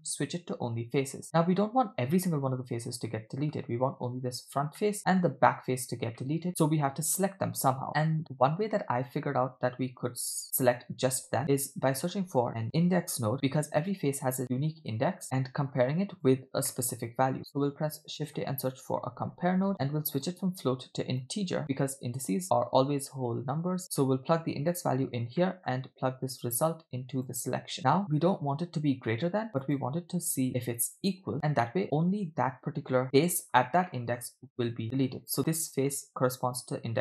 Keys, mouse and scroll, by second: 1.2-3.6 middle drag, 4.8 middle click, 6.2-7.3 middle drag, 7.6 scroll down 2, 7.9 middle click, 7.9 click, 11.4 shift+a, 15.2 middle click, 15.8 click, 16.7 middle click, 17.4 shift+a, 20.2-21.3 drag, 22.3-22.8 scroll up 3, 23.0-24.8 drag, 25.4 middle click, 26.5-27.3 drag, 27.8 middle click, 28.2-29.6 scroll up 2, 29.6 scroll up 1, 29.6-31.2 drag, 31.7-33.0 middle drag, 33.9 middle click.